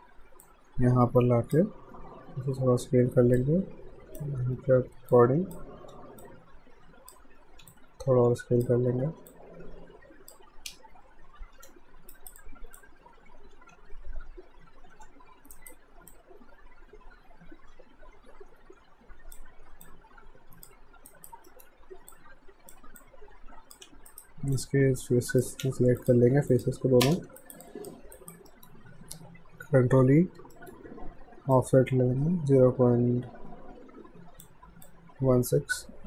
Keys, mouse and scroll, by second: 0.4 click, 1.9 r, 3.4 click, 5.9 w, 6.2 click, 7.5 r, 7.7 click, 9.1 w, 9.3 click, 10.7 space, 11.6 f, 12.1 alt+right click, 12.4 alt+click, 13.5 r, 15.6 alt+right click, 16.1 click, 19.9 alt+click, 21.1 right click, 21.5 middle click, 22.1 click, 23.0 click, 23.9 q, 24.1 right click, 25.0 click, 26.0 shift+click, 26.5 alt+click, 27.0 space, 27.4 alt+right click, 27.7 alt+click, 28.2 alt+right click, 28.5 alt+middle click, 30.0 e, 30.6 alt+middle click, 31.5 click, 34.9 alt+click.